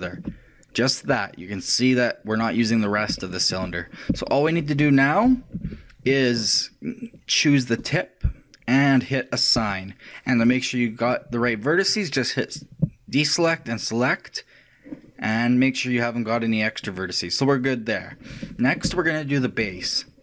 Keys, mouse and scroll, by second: 5.7 ctrl+shift+KP_3, 7.8-11.4 drag, 12.6-15.5 drag, 15.5 middle click, 16.4-19.8 drag, 20.0 shift+middle click.